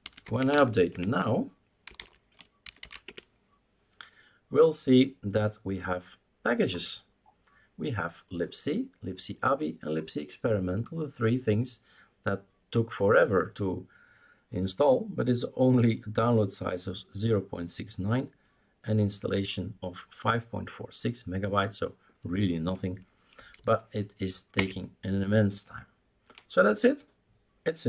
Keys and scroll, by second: 0.0-3.3 typing, 23.5 typing, 24.5 Return.